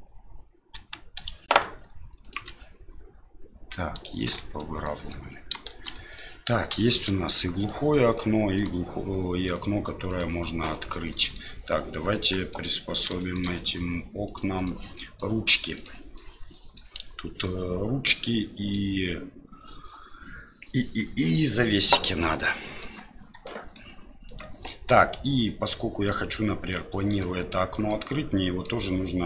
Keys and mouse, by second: 0.7 g, 4.4 Tab, 4.8 middle drag, 5.7 shift+z, 5.9 middle drag, 6.7 shift+middle drag, 7.5 right click, 7.9 middle drag, 8.5 right click, 9.5 right click, 10.1 right click, 10.7 right click, 11.1 middle drag, 12.3 middle drag, 13.2 shift+middle drag, 14.2 click, 14.5 click, 14.9 middle click, 15.7 right click, 16.1-16.8 middle drag, 17.4-18.7 middle drag, 22.4-22.8 middle drag, 23.4 middle drag, 24.2 right click, 24.7 Tab, 26.1-27.2 middle drag, 27.9 middle click.